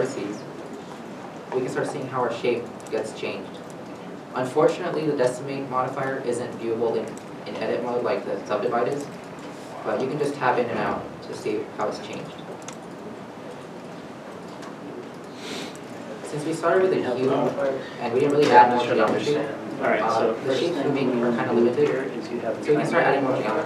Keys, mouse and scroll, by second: 0.2 g, 1.0 Tab, 1.7 middle click, 2.1 Tab, 3.0 middle click, 3.7 g, 3.8 Tab, 4.2-5.1 scroll down 1, 6.6 middle click, 6.9 Tab, 8.6 scroll, 8.7 scroll up 1, 9.5 middle click, 9.9 g, 10.4 Tab, 11.2 middle click, 11.3 Tab, 11.8 g, 13.1 Tab, 13.5 Tab, 14.2 g, 14.6 Tab, 15.3 middle click, 15.5 Tab, 16.3 g, 17.2 middle click, 17.7 Tab, 18.2-18.8 scroll, 19.0 shift+middle click, 20.0 Tab, 21.5 g, 22.0 Tab, 22.5 middle click, 22.6 middle click, 23.1 Tab.